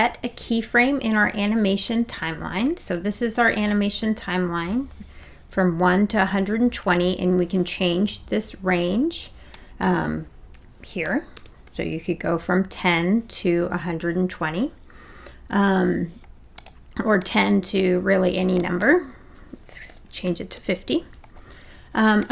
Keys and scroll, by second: 10.5 1, 11.0 0, 11.3 Return, 19.9 5, 20.2 0, 20.6 Return.